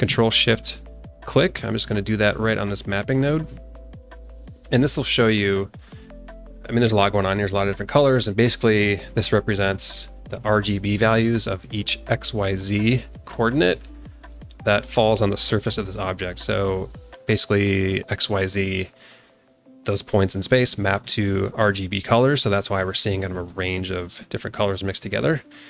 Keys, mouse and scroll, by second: 2.8 ctrl+shift+click, 4.4 middle click, 6.2 alt+middle click, 6.7-8.7 alt+middle drag, 9.3 scroll up 1, 9.7 alt+middle click, 11.1 alt+middle click, 13.3 alt+middle click, 15.8 alt+middle click, 22.6 alt+middle click, 23.6 alt+middle click, 23.8 alt+middle click, 24.3 alt+click, 24.6 alt+middle click, 24.7 alt+click, 25.2 alt+middle click.